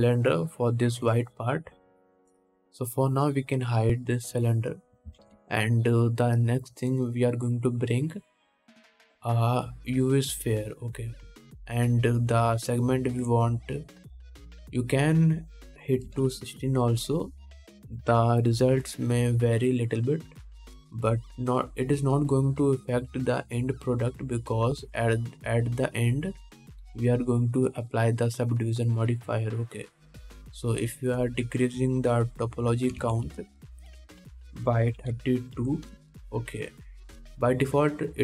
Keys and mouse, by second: 0.3-5.6 drag, 5.6-12.7 middle drag, 6.4 shift+a, 12.7-38.2 drag.